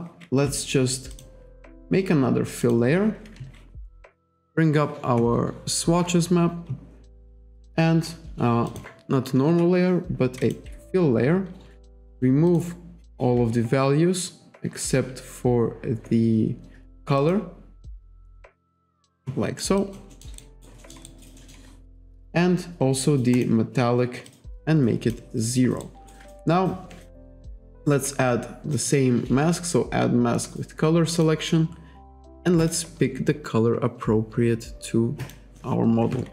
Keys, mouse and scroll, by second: 1.2 click, 2.7 click, 4.5 click, 8.7 click, 9.5 Delete, 10.5 click, 12.2 click, 12.5 click, 17.2 click, 18.5 click, 19.7 alt+right click, 19.8 alt+click, 20.2 alt+middle click, 20.4 alt+right click, 20.8 alt+middle click, 23.4 click, 24.3 click, 25.9 alt+right click, 28.8 click, 31.1 click, 32.6 click, 35.2 click.